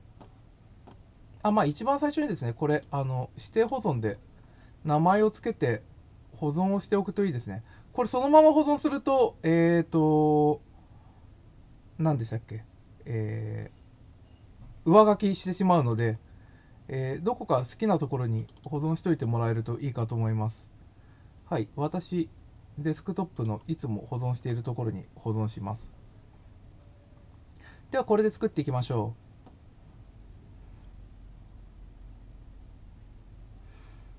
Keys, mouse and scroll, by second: 2.6 click, 3.5 click, 15.8 click, 16.8 scroll down 1, 18.3 click, 18.5 click, 23.3 click.